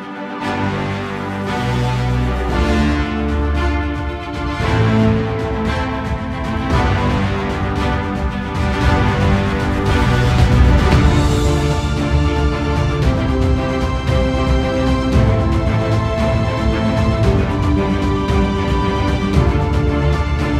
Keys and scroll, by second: 2.6 ctrl+i, 6.4 ctrl+i.